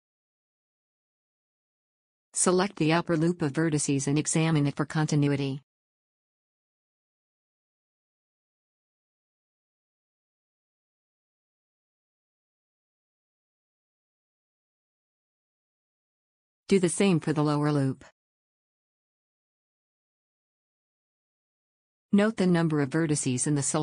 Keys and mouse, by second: 1.3 x, 12.8 z, 16.0 z, 18.4 a, 20.7 z, 21.8 z.